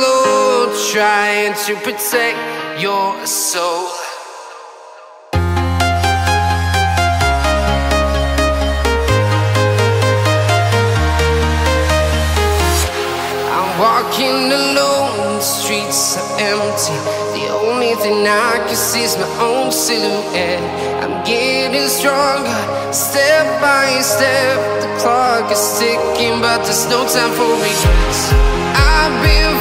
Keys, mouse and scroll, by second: 1.5 click, 2.4-3.2 scroll up 1, 3.2 right click, 4.0 scroll up 1, 6.8 right click, 7.6-8.0 scroll up 1, 8.7 click, 8.9-9.3 scroll down 1, 9.3 click, 9.7-11.2 right drag, 11.2-11.5 scroll, 12.2 right click, 13.1 click, 13.5 right click, 14.2 click, 16.5 scroll up 1, 17.4-18.4 right drag, 18.4 scroll down 1, 19.0 click, 19.2-19.9 scroll down 1, 20.3 scroll, 20.3 click, 20.7-21.3 scroll down 1, 21.3 click, 22.0 scroll down 1, 23.0 click, 23.2-23.6 scroll down 1, 23.6-24.0 scroll up 1, 25.5 scroll down 1, 26.2 click, 26.4-26.8 scroll down 1, 28.0 scroll up 1, 28.2 click, 28.6-29.0 scroll up 1, 29.0 right click, 29.5 scroll up 1.